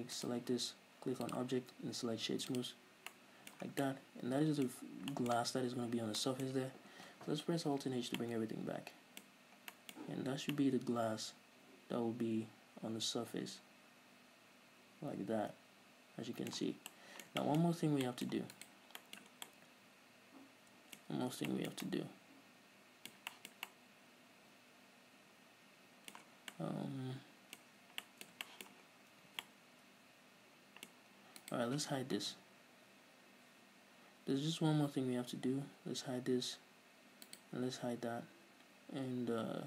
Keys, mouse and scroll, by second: 0.5 right click, 1.6-3.5 drag, 3.3 scroll down 2, 3.5-9.7 middle drag, 4.0 scroll down 2, 5.1-5.5 scroll up 2, 6.3 scroll down 2, 8.1 alt+h, 9.7 scroll up 1, 10.4 scroll up 1, 11.1 middle click, 11.7-17.1 shift+middle drag, 17.1 scroll down 2, 17.2-17.7 middle drag, 17.8 shift+middle drag, 18.1-18.4 scroll up 2, 18.4-18.9 middle drag, 18.9 right click, 19.6 middle click, 19.7 scroll down 2, 20.3 middle click, 21.1-26.8 middle drag, 21.5-21.9 scroll up 2, 26.7 scroll down 2, 26.9-28.0 middle drag, 28.0-28.4 scroll up 2, 28.4-29.1 middle drag, 29.1 scroll up 1, 29.2 middle click, 29.2 scroll down 1, 29.3-29.9 middle drag, 29.5 a, 30.8-31.4 middle drag, 31.4-31.8 scroll up 2, 31.8 right click, 35.8 h, 37.7 right click.